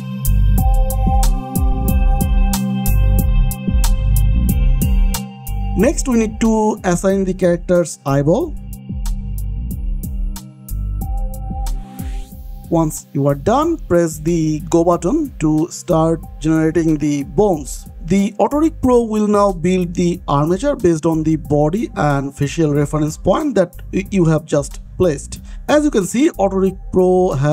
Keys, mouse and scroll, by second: 0.4 click, 1.2 click, 1.8-4.3 typing, 2.1 click, 2.7 click, 3.2 click, 3.9 click, 4.6 click, 4.9 scroll down 1, 5.5 scroll up 1, 6.5 click, 7.0-7.5 scroll down 1, 7.5 click, 8.1 l, 8.8 Down, 9.0 Return, 9.7 click, 10.3 r, 11.5 click, 11.9-12.4 scroll down 1, 12.4 click, 15.3-17.4 scroll down 1, 23.5 scroll down 1, 24.5 middle click, 25.5 shift+middle click, 26.4 middle click, 27.2 shift+middle click.